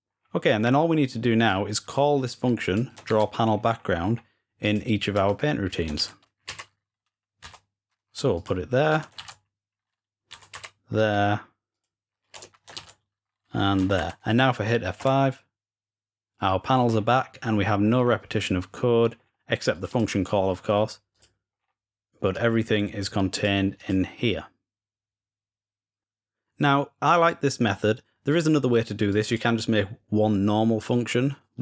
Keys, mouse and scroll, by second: 1.3-2.8 drag, 2.9 ctrl+c, 3.3-4.5 scroll up 1, 5.8 ctrl+v, 8.2 click, 9.0 ctrl+v, 11.0 scroll down 2, 11.5 click, 16.7 scroll down 2, 19.0-19.5 scroll up 2, 19.5 click, 19.7 click, 20.9 click, 22.1-23.3 drag, 23.6 click, 28.9 click.